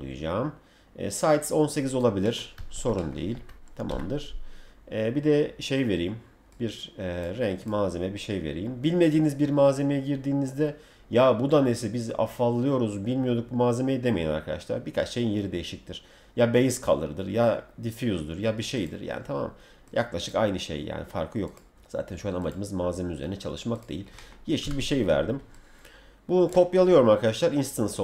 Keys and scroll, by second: 2.6 Escape, 3.3 F3, 24.6 w.